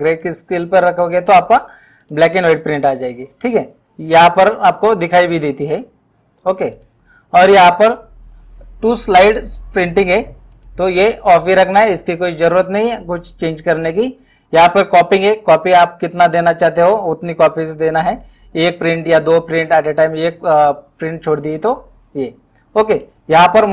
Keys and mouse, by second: 0.2 click, 2.0 click, 4.4 click, 6.7 click, 10.6 click, 15.3 click, 23.0 click.